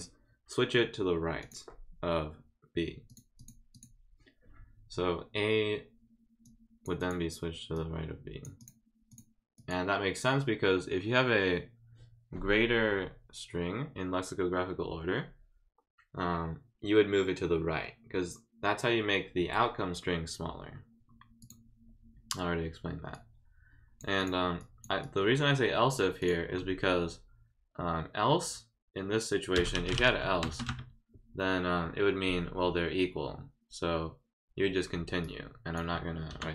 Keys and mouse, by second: 1.4 click, 3.1 click, 3.4 click, 3.7 click, 6.4 click, 7.0 click, 7.7 click, 8.6 click, 9.1 click, 9.5 click, 21.4 click, 23.1 click, 24.2 click, 24.6 click, 25.0 click, 26.2 click, 29.7 e, 30.0 e, 35.2 click.